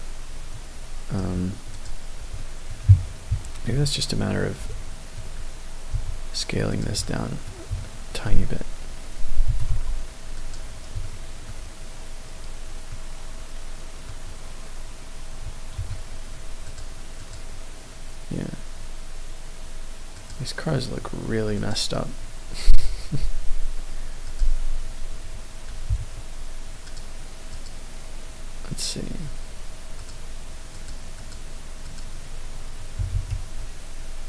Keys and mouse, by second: 1.2 d, 1.2 d, 2.4 middle click, 3.3 KP_3, 3.7 KP_1, 4.7 shift+click, 4.7 shift+middle drag, 4.9 shift+click, 5.0 shift+middle click, 5.9 s, 6.7 click, 7.0 middle click, 7.7-8.3 shift+middle drag, 9.4 g, 9.7 y, 9.7 t, 10.3 click, 11.0-11.4 shift+middle drag, 12.9-14.1 middle drag, 15.7 KP_0, 16.7 click, 17.1 click, 20.1 click, 27.5 click, 29.9 click, 30.7 click, 31.9 click, 33.1 ctrl+a.